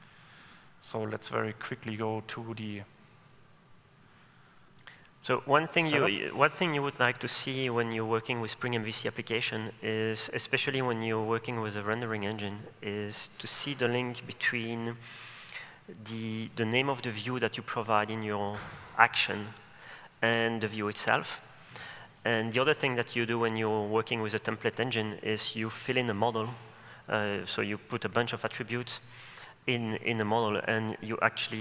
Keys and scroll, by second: 9.5 super+1.